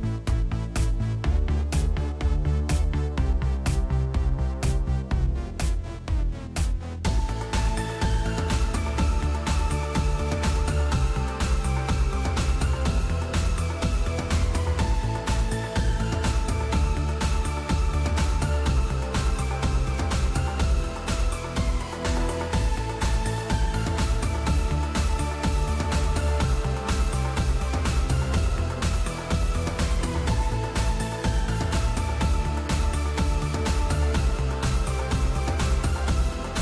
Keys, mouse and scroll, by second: 28.2 click.